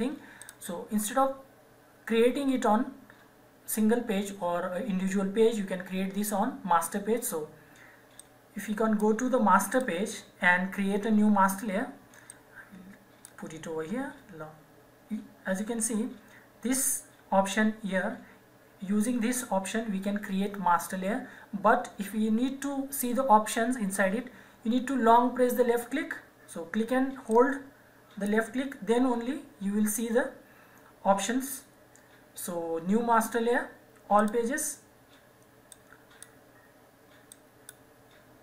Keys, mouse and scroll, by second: 0.3 click, 8.2 click, 13.2 click, 27.3 click, 34.2 click.